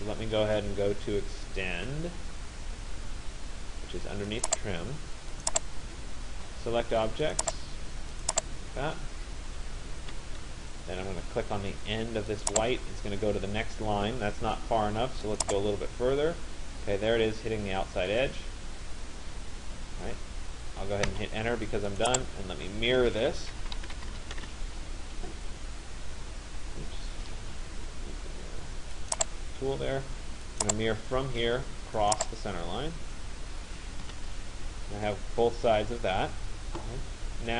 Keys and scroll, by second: 9.7 Return, 20.8 Return, 23.6 m, 24.5 Return, 33.7 Return.